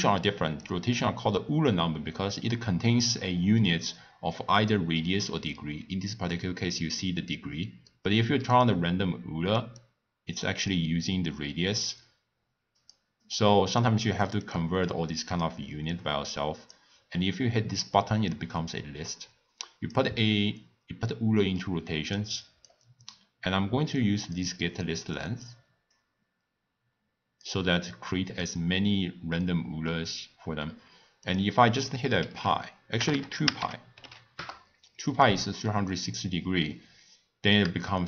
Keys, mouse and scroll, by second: 0.6-3.7 drag, 7.9 scroll down 1, 7.9-8.5 middle drag, 8.5 click, 9.8-12.9 drag, 13.5 click, 14.8 click, 15.1-21.3 drag, 21.9 click, 22.4-24.0 drag, 24.7 click, 25.1-28.0 drag, 31.2-33.1 drag, 33.1 BackSpace, 35.5 scroll down 1, 35.7-36.8 middle drag, 36.8 scroll up 1, 36.9 scroll down 1, 36.9-37.5 scroll up 1, 37.8-38.0 shift+middle drag.